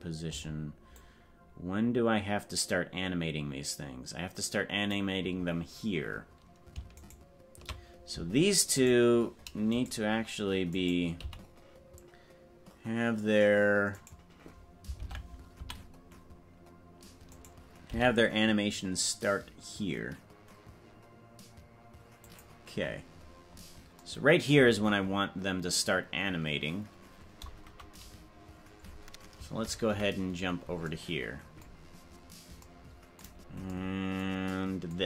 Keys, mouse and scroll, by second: 1.1-5.0 drag, 8.7 right click, 9.7 right click, 11.2 g, 15.1 ctrl+Tab, 17.3 right click, 17.9 g, 23.9 scroll up 10, 29.9 KP_Decimal, 32.1 scroll up 4.